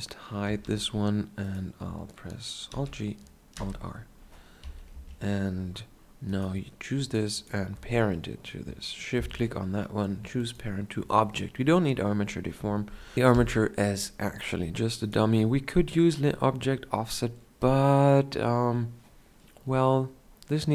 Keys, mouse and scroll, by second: 0.6 h, 2.9 alt+g, 3.7 alt+r, 4.8 KP_1, 5.1 KP_Decimal, 8.0 right click, 9.3 ctrl+p.